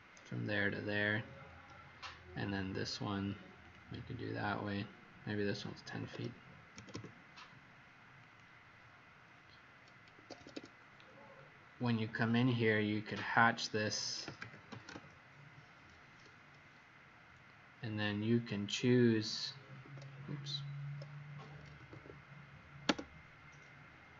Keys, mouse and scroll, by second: 0.8-3.6 scroll up 1, 3.6 click, 5.8 KP_1, 5.9 KP_0, 6.9 Return, 6.9 ', 8.2 click, 10.1 Escape, 10.3 Escape, 10.5 Escape, 11.3 scroll down 1, 12.6 scroll up 1, 13.9-15.1 typing, 19.7 Escape, 21.5-22.3 typing.